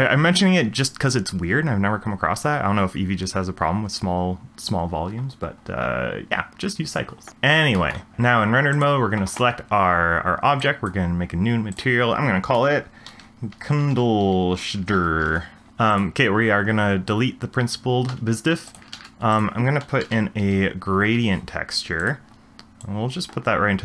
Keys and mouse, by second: 7.9 shift+middle drag, 10.6 click, 11.7-15.3 drag, 15.9 click, 18.1 x, 18.7 click, 19.0 shift+a, 22.8 click, 22.9-23.8 drag.